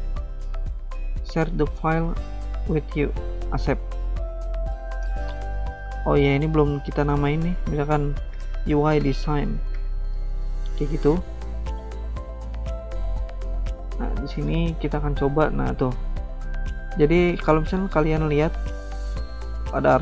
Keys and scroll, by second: 5.1 alt+Tab, 8.0-10.0 typing, 11.1-12.0 typing, 11.1 alt+Tab, 13.4 typing, 17.5 alt+Tab.